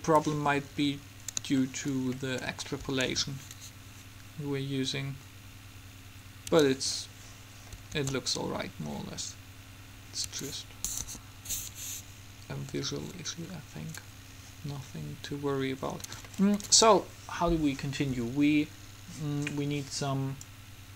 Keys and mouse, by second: 3.3 alt+a, 6.7 Escape, 8.1 alt+a, 10.5 Escape, 11.2 KP_3, 20.6-20.9 drag.